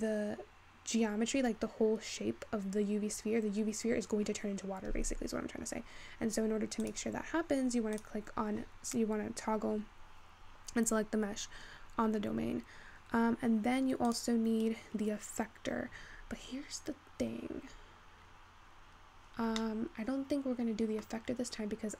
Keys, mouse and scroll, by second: 6.9 click, 8.0 click, 8.6-9.7 scroll down 15, 9.7-11.2 scroll down 13, 11.2-13.3 scroll down 10, 14.1 click, 16.1 scroll down 1, 16.3-17.8 scroll up 3, 17.8-18.2 scroll up 5, 18.2-18.9 scroll down 5, 18.9-19.3 scroll up 4, 19.6-21.3 middle drag, 21.3-21.6 scroll up 1, 21.6-21.9 scroll down 3.